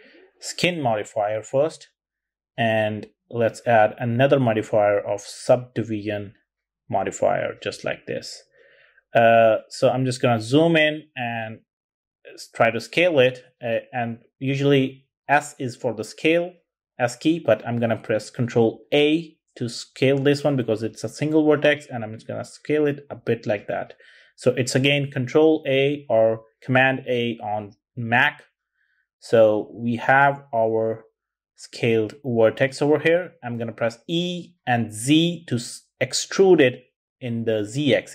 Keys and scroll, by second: 16.5 super+a, 31.0 e, 33.2 z.